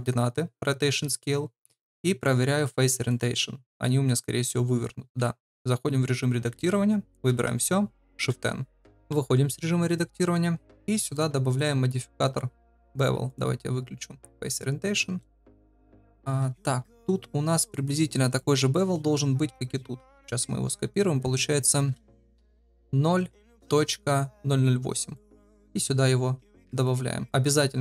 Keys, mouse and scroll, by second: 2.0-3.3 drag, 3.8 middle drag, 6.5 Tab, 7.3 a, 8.3 shift+n, 9.1 Tab, 9.5-9.9 middle drag, 10.1 shift+middle drag, 13.3-14.4 drag, 14.9 middle click, 18.3 click, 20.2 click, 21.7 ctrl+c, 25.1 click, 26.7 ctrl+v.